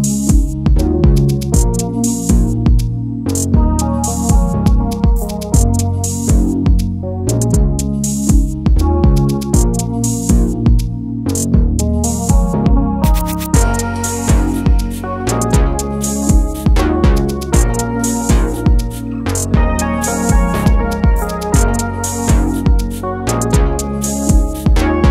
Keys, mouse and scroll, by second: 7.9-9.2 typing, 10.9 click, 12.3-13.6 typing, 14.8 click, 15.9 BackSpace, 17.4-20.5 typing, 23.8 click, 24.7-25.1 typing.